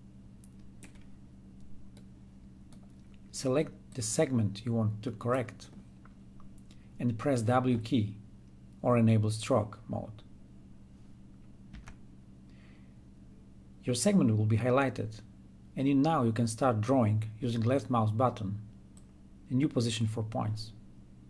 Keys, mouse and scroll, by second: 4.0-7.7 drag, 11.6 w, 18.9-21.2 drag.